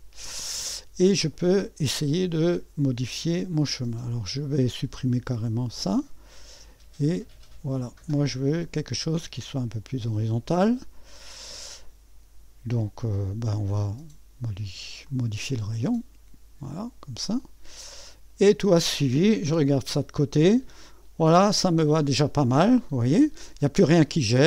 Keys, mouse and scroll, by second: 1.1-1.5 scroll up 1, 4.4 click, 5.4 Delete, 6.6-10.2 drag, 13.5 click, 15.0 click, 16.6 click, 17.4 click, 19.5 3, 20.9 middle click, 21.8-22.5 typing.